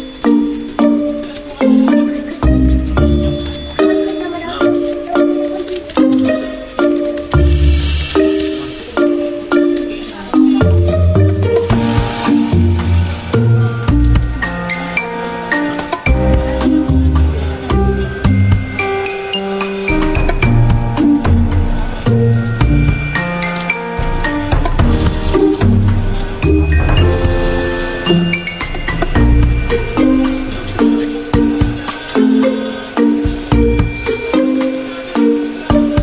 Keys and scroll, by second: 4.1 m, 7.7 ctrl+z, 8.4 v, 9.8-15.4 typing, 11.9 ctrl+a, 17.1-19.6 typing, 27.0 a, 29.9 alt+Right, 30.5 v, 33.4 ctrl+g.